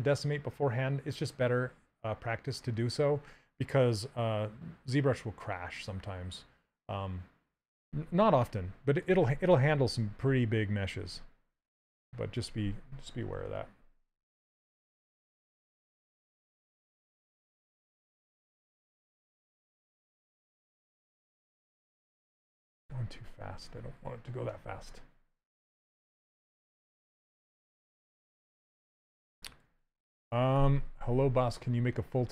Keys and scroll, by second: 12.1 s, 16.6 ctrl+z, 16.7 s, 20.4 ctrl+z, 22.9 ctrl+z.